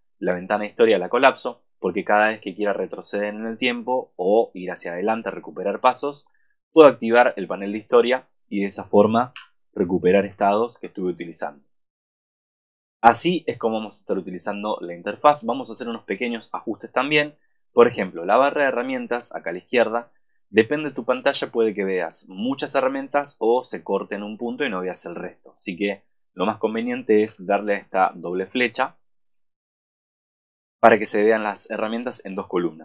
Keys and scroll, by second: 10.5 super+-, 27.2 super+=.